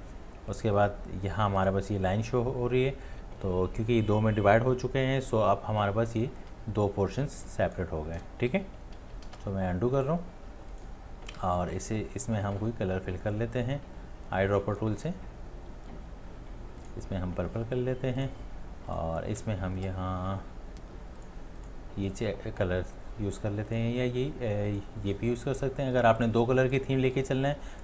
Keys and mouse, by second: 8.8 right click, 9.0 ctrl+z, 9.5 ctrl+z, 27.2 space, 27.7 click.